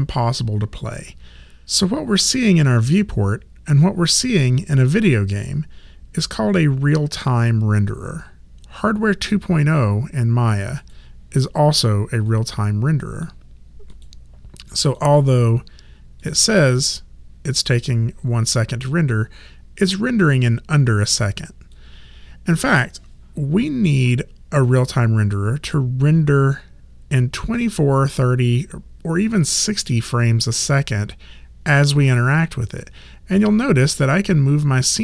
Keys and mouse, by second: 10.8 click, 21.7 click, 33.4 alt+click.